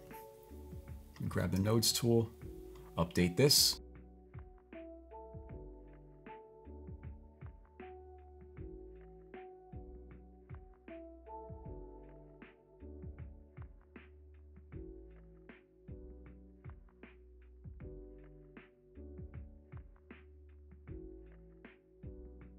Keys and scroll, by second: 15.4-16.1 typing.